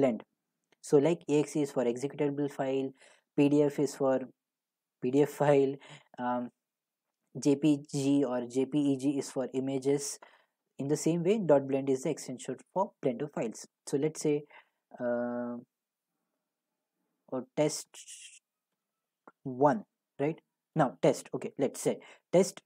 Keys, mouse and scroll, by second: 0.2 Delete, 0.5 Delete, 18.0-19.0 typing, 20.8 BackSpace, 22.5 typing.